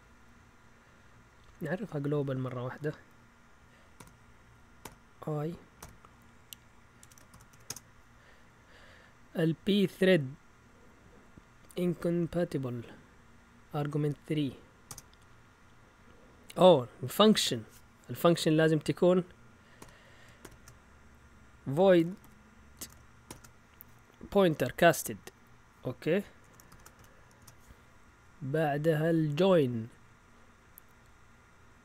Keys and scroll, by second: 0.0-0.2 typing, 2.1-2.8 typing, 3.9-7.8 typing, 14.9 Return, 19.8-23.2 typing, 26.4 Escape, 26.7 shift+;, 26.9 x, 27.3 Return.